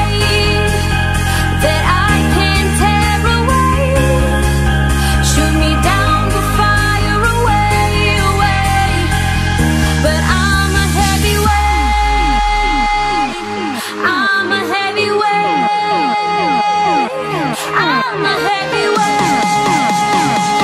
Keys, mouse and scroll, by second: 0.7 z, 1.4 click, 2.0 Tab, 2.6 Tab, 3.1 click, 4.8 click, 6.8 Tab, 7.3 click, 7.8 click, 8.3 Tab, 9.1 ctrl+z, 9.5 ctrl+z, 9.8 ctrl+z, 10.1 ctrl+z, 10.4 ctrl+z, 10.7 ctrl+z, 11.0 ctrl+z, 11.3-12.9 ctrl+z, 13.3 ctrl+z, 15.2 Tab, 16.8 x, 17.7 scroll down 3, 18.1-19.5 middle drag, 19.5 KP_7, 20.0 shift+a.